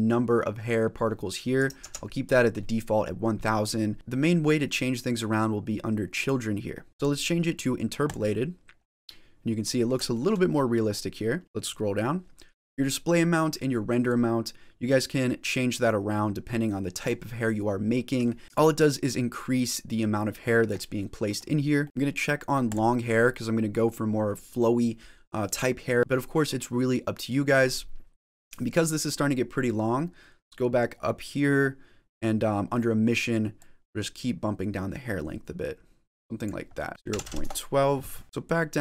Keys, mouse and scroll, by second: 1.7 ctrl+z, 3.9-5.3 scroll down 4, 6.0 click, 6.6 scroll down 4, 6.9 click, 7.9 click, 8.9 middle click, 10.0 shift+middle click, 10.4 middle click, 10.8 scroll up 1, 11.2-11.5 scroll down 7, 11.4 middle click, 13.9 click, 17.2 middle click, 18.4 click, 18.9 click, 20.9 middle click, 21.4-21.7 scroll up 3, 21.7 middle click, 21.8 click, 22.7 click, 28.7-29.4 scroll up 2, 29.4-30.4 scroll up 5, 30.4-31.3 scroll up 6, 31.3-32.6 scroll up 4, 33.4 click, 36.6 middle click, 36.9 click, 38.2 scroll down 3, 38.3 middle click, 38.3 click.